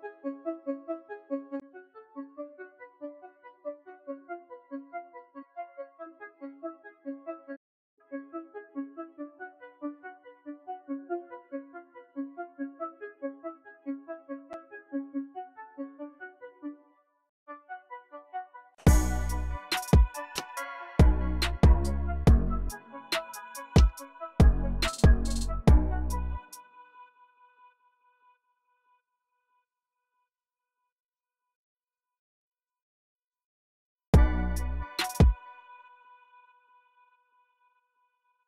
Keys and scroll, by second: 8.6 v, 16.6-21.6 typing, 24.2 super+r, 24.5-26.2 typing, 26.5 super+z, 27.9-28.8 typing, 30.6 u, 32.0 c, 35.0 space.